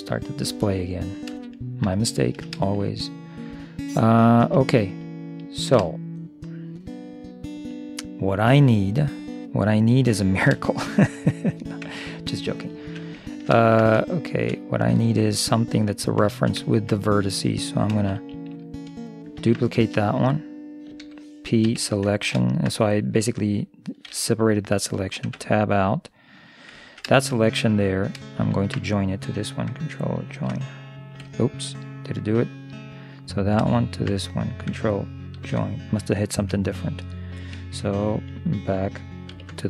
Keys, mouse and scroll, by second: 1.4-4.5 middle drag, 5.4-7.7 middle drag, 10.3-11.9 middle drag, 11.9 Tab, 12.3-13.3 right drag, 12.9 Tab, 13.3 middle click, 15.3 middle click, 15.7-17.6 right drag, 17.6 middle click, 19.4 shift+d, 21.0 p, 22.1-23.2 middle drag, 25.3 Tab, 26.4-28.1 right drag, 26.8-28.1 drag, 28.4 click, 28.4 right click, 30.3 ctrl+l, 31.9 middle click, 33.1-35.7 right drag, 35.5 ctrl+j, 36.4 middle click, 39.3 ctrl+KP_3.